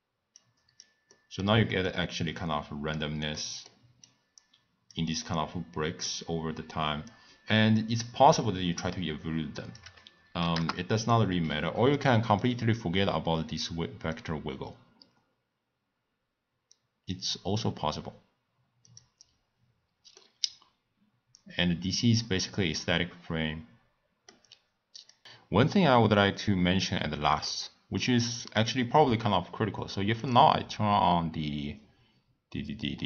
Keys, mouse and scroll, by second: 1.1-4.0 middle drag, 4.0 click, 5.2-7.8 middle drag, 7.8-12.3 drag, 12.4 click, 12.7-14.2 drag, 18.8 click, 20.2-23.3 middle drag, 27.5-31.6 middle drag, 31.6 click.